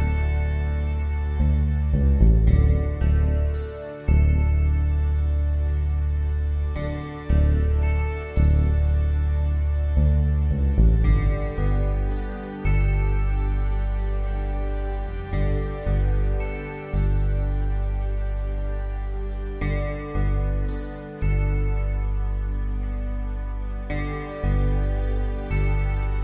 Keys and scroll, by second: 1.0 Return, 13.6 Down, 20.8 ctrl+t, 22.6 Return, 22.7 Right, 22.9 Up.